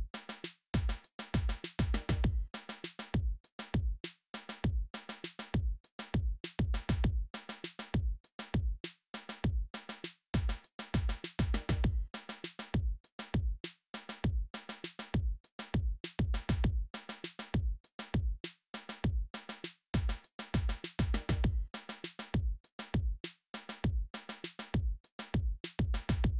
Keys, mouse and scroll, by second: 0.0-1.1 typing, 0.3 click, 1.9-5.8 drag, 7.3-11.1 drag, 12.0-13.2 drag, 13.5-14.5 middle drag, 18.9 middle click, 22.7-23.7 middle drag, 23.9 middle click, 24.9 click, 25.2 middle click.